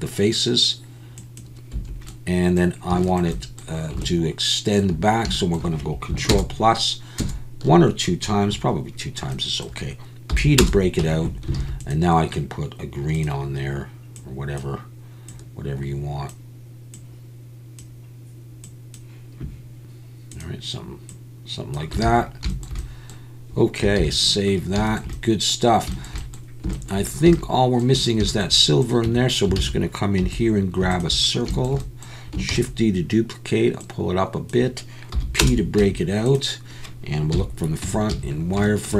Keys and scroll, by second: 1.7 Escape, 6.3 ctrl+KP_Add, 7.2 ctrl+KP_Add, 11.0 Tab, 11.6 alt+a, 22.0 alt+a, 24.0 ctrl+s, 29.1 Tab, 29.6 alt+a, 30.2 2, 32.5 shift+d, 35.1 p, 35.8 Tab, 37.3 KP_1, 37.8 Tab, 38.1 a.